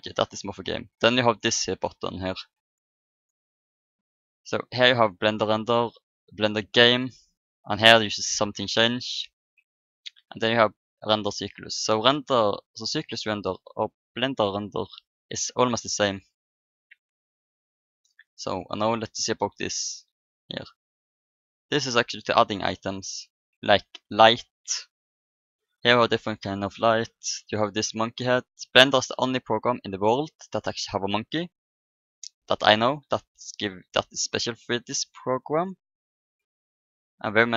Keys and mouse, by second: 3.1-4.8 drag, 5.3-6.8 drag, 10.0-11.7 drag, 13.0-14.8 drag, 19.5-21.3 drag, 21.4-24.0 drag, 24.0-25.1 middle drag, 28.2-31.5 drag, 30.7 middle click, 31.5-34.1 middle drag, 34.9-37.2 drag.